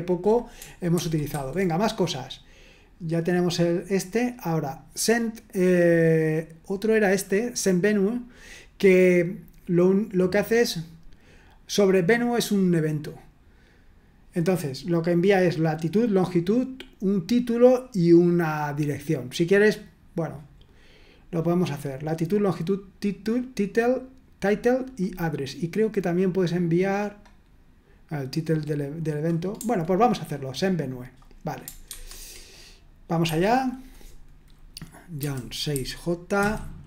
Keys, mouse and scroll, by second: 0.9 super+1, 1.3 super+2, 3.2 click, 7.3 click, 30.8 click, 31.9 super+1, 33.3 Escape, 33.6 click, 35.2-36.8 typing.